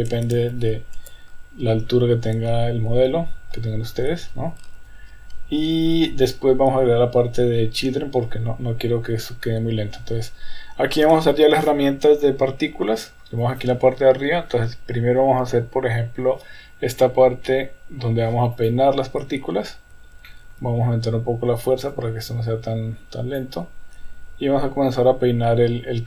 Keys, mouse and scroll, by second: 13.6-18.8 drag, 20.3 shift+middle drag, 22.0-23.5 drag.